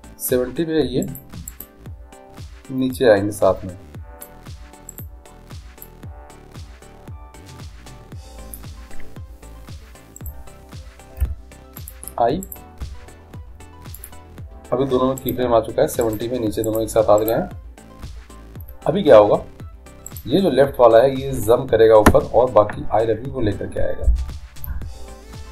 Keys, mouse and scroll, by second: 1.7-3.5 right drag, 3.1-4.9 drag, 6.0-7.8 drag, 6.0-7.0 right drag, 10.3-12.2 right drag, 11.4 i, 12.6-14.2 right drag, 13.0 i, 15.4-19.2 right drag, 20.3-22.1 right drag.